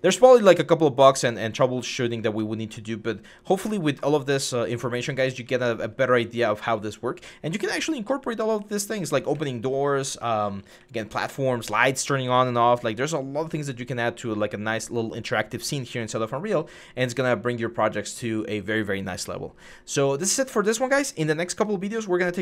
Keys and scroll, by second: 0.0-0.9 typing, 1.9-3.8 typing, 5.2-6.2 typing, 8.0-14.1 typing, 15.3-16.0 typing.